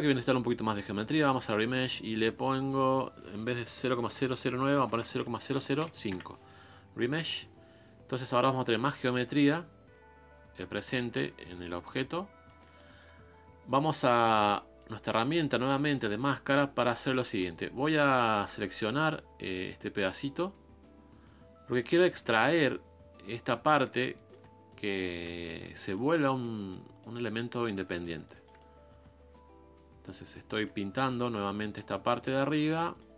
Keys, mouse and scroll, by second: 11.0 shift+middle click, 11.2-11.6 scroll up 2, 11.6-12.6 shift+drag, 12.6 scroll up 1, 12.7 scroll down 1, 12.7 middle click, 13.1-13.9 scroll up 2, 13.9-14.8 scroll up 1, 14.8-15.9 drag, 15.9 middle click, 16.9 f, 18.0 f, 18.6-21.8 drag, 22.5 ctrl+click, 23.4 scroll up 2, 24.0-25.2 ctrl+drag, 25.2 scroll down 2, 25.3 shift+middle click, 25.9 click, 26.5 middle click, 27.0 click, 27.9 middle click, 28.6-31.0 drag, 31.0 shift+middle click, 31.3-32.5 drag, 32.5 middle click.